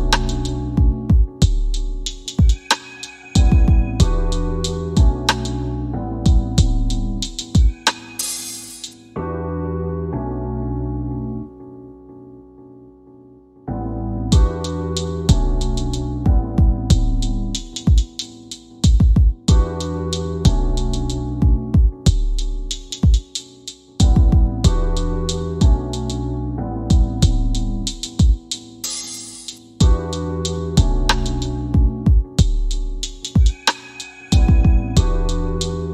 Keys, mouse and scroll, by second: 4.6-7.4 right drag, 10.4 click, 12.3-13.7 drag, 15.1 space, 20.5 space, 21.6 shift+Left, 23.5-25.3 middle drag, 26.6 middle click.